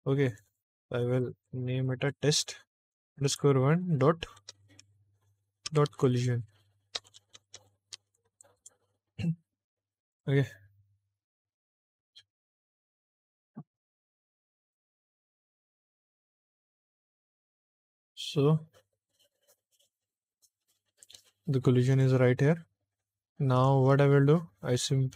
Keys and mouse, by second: 0.1 click, 0.3-8.5 drag, 7.0 BackSpace, 7.4 BackSpace, 10.0 click, 17.7 click, 21.8 click.